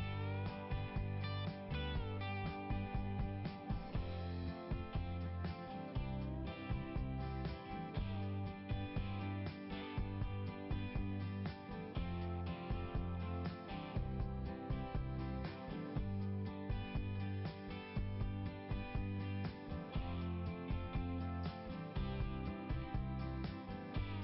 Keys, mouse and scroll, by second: 1.6 right click, 3.1 click, 4.0 click, 4.4 click, 5.8-9.8 typing, 10.3 Return, 10.9 Return, 11.2 Return, 11.5 Return, 11.8 Return, 15.0 click, 15.1 click, 16.4 click, 18.7 click, 19.4 click, 20.2 click, 20.8 click, 21.3 click, 23.7 right click.